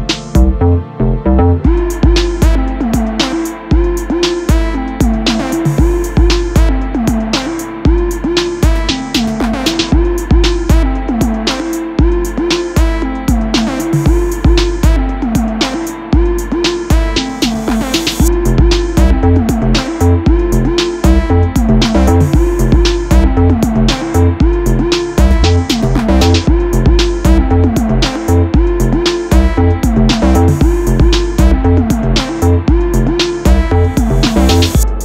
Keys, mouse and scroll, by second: 0.8 m, 6.2 KP_0, 7.7 m, 16.5-21.4 drag, 20.4 m, 26.0 click, 30.8 click, 34.0-35.0 drag.